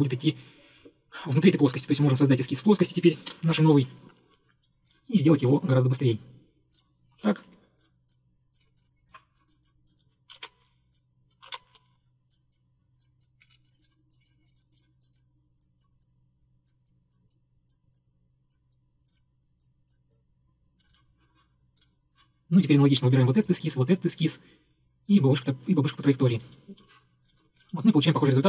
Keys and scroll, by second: 3.4 ctrl+8, 7.5 Escape, 8.7 Escape, 8.8 Escape, 10.4-12.1 typing, 10.5 Return, 13.5 Escape, 13.6 Escape.